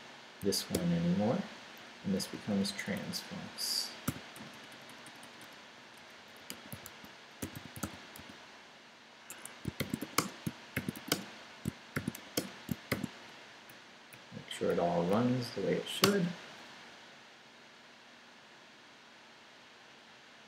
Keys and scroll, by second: 0.4 d, 1.4 Down, 1.8 Right, 4.1 i, 4.3 BackSpace, 5.9-12.9 typing, 9.3 Escape, 11.6 shift+Return, 13.4 shift+Up, 14.7 Up, 15.5 Up, 16.0 Return.